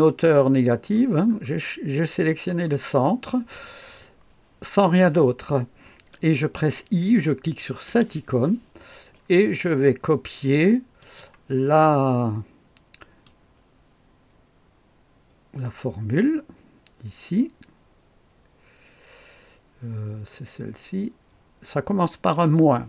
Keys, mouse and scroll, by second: 1.2-2.6 scroll up 1, 2.6-7.8 scroll down 1, 7.8 i, 10.9 click, 13.2-22.3 drag.